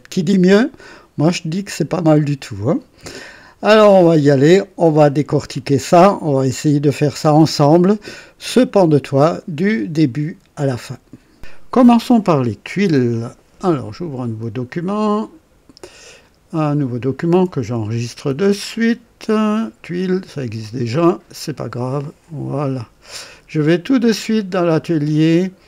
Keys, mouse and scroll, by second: 1.7 click, 4.1 click, 15.1 click, 18.3 ctrl+s, 19.9 click, 21.1 click, 22.2 click, 24.3 click.